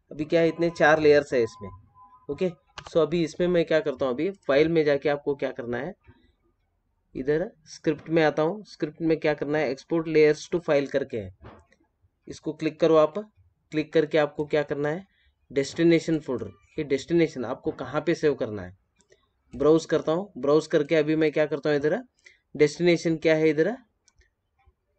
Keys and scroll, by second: 2.7 F7.